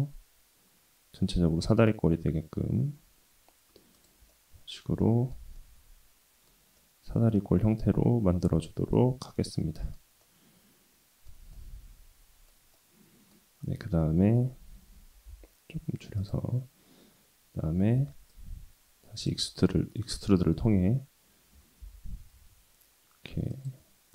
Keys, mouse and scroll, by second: 4.3 middle click, 5.0 shift+middle click, 5.6 middle click, 6.8-10.0 middle drag, 10.2-11.3 middle drag, 11.5-12.6 middle drag, 12.7 middle click, 15.0 g, 18.0 3, 18.3 click, 19.5 middle click, 20.7 e.